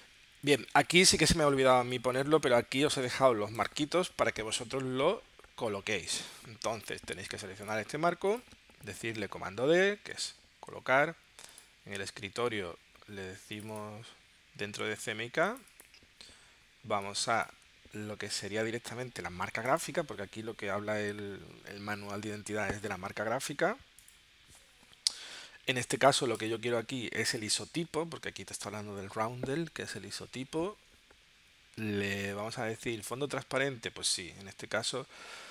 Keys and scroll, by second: 1.6 space, 9.3 super+d.